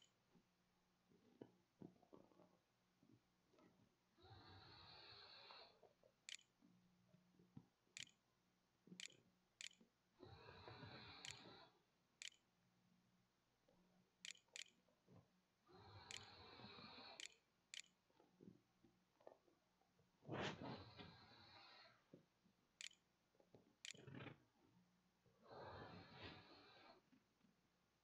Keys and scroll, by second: 0.0-1.7 typing, 4.3-9.1 typing, 10.6-17.5 typing, 10.8 Tab, 23.6 ctrl+s, 24.1 a.